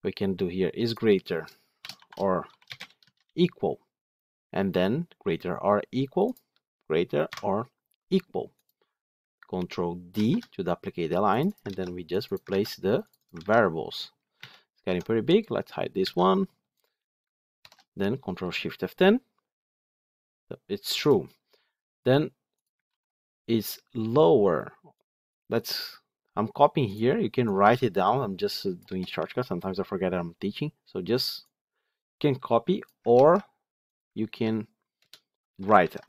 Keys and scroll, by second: 10.0 ctrl+d, 12.0 ctrl+c, 12.4 ctrl+v, 14.2 alt+1, 17.5 ctrl+shift+F10, 22.8 ctrl+d, 33.0 ctrl+c, 35.6 ctrl+v.